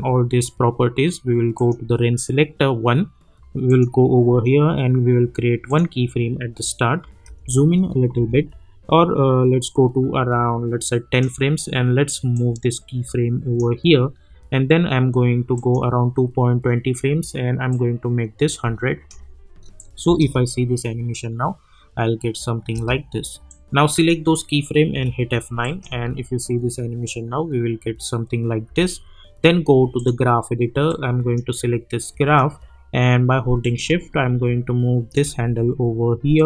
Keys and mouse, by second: 7.2 =, 8.1 =, 9.6-15.5 drag, 17.8-19.8 drag, 20.7 space, 22.7 space, 23.5-24.9 drag, 24.9 F9, 25.6 click, 25.9 space, 28.6 space, 29.9-36.4 drag.